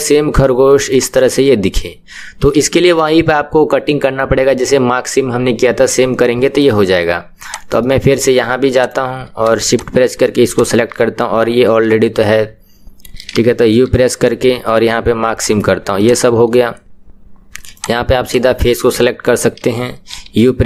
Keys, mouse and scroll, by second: 6.8 KP_1, 7.5 click, 7.8-8.9 middle drag, 8.9 click, 10.5 shift+click, 15.4 u, 16.0 click, 17.8 click, 18.8-20.6 middle drag.